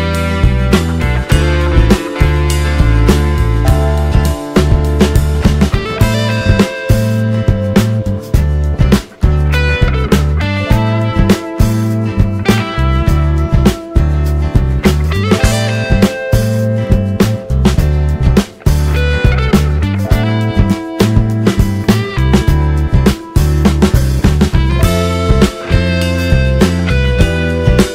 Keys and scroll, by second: 27.1 space.